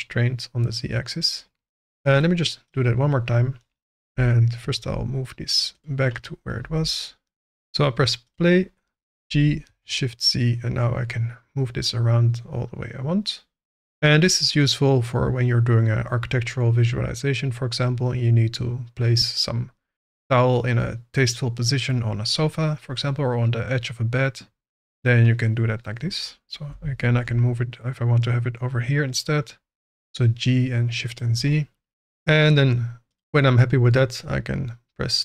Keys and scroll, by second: 4.0 g, 4.7 shift+z, 6.6 g, 9.7 shift+z, 26.6 g, 27.0 shift+z.